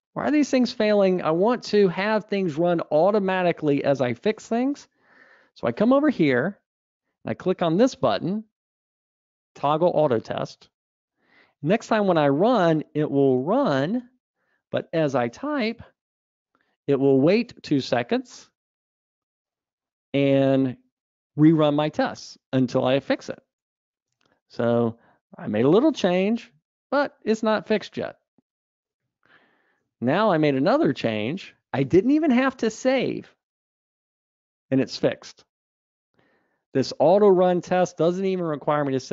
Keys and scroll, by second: 12.1 super+r, 30.9 Tab.